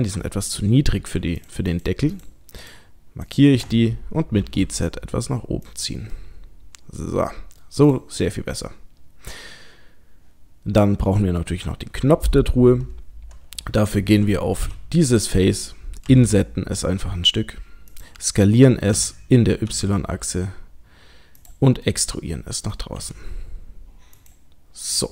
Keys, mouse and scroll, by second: 1.4-2.8 alt+shift+click, 4.4 g, 6.2 middle click, 7.8 click, 8.3 middle click, 9.1 middle click, 9.9-10.9 scroll down 1, 11.1-12.3 scroll up 2, 14.6 3, 15.2 click, 16.1 click, 16.1 i, 18.9 s, 21.9 middle click, 23.0 e.